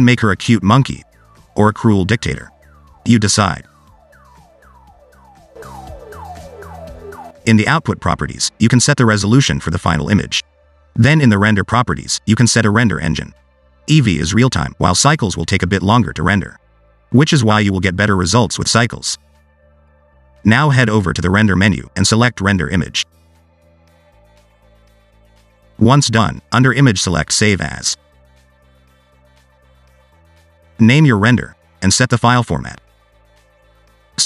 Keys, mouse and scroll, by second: 0.2 click, 1.8 click, 9.0 click, 9.7-10.7 scroll up 3, 12.9 click, 14.5 click, 21.6 click.